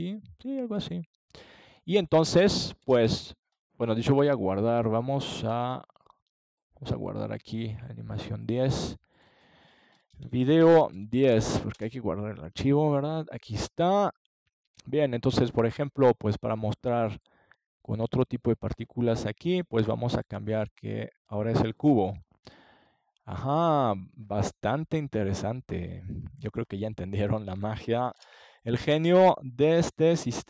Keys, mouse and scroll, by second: 2.2-5.0 drag, 5.1-7.1 drag, 7.1-9.5 middle drag, 9.5 click, 10.9-12.5 middle drag, 12.5 click, 14.6-16.0 middle drag, 16.0 ctrl+s, 18.5-21.2 middle drag, 21.2-25.1 drag, 26.3-28.3 middle drag.